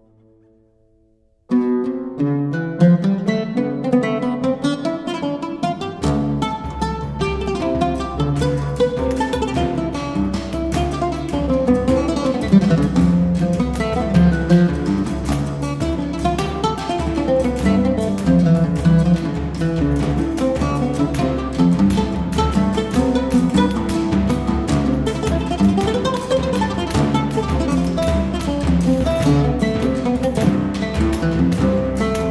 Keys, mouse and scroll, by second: 0.2-6.9 drag, 7.2-10.7 drag, 10.7 space, 10.8 click, 11.2 space, 19.2-24.7 drag, 25.2-29.1 drag, 28.9 typing, 30.1-32.3 drag, 30.4 typing.